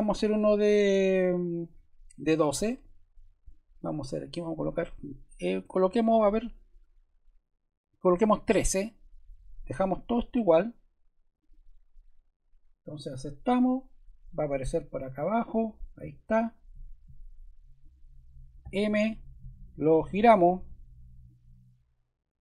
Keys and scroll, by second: 18.6 m.